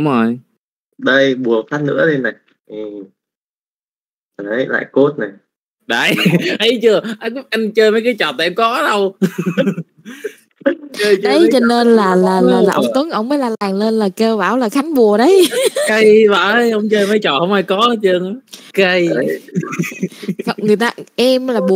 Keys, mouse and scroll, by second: 1.3 click, 2.5 z, 3.0 middle click, 3.5 a, 3.8 shift+middle click, 4.4 n, 6.6-8.0 drag, 8.6 middle click, 9.1 n, 9.5 middle click, 10.6 alt+a, 10.8 click, 11.1 middle click, 11.7 z, 12.1 middle click, 12.6 shift+middle click, 14.8-17.7 drag, 18.8 click.